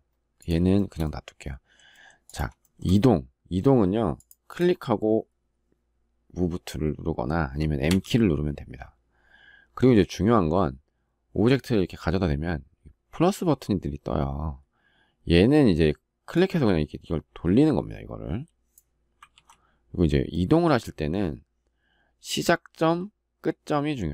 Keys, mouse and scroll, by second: 0.5 shift+middle click, 0.6 shift+double middle click, 2.5 shift+middle click, 19.1 ctrl+z.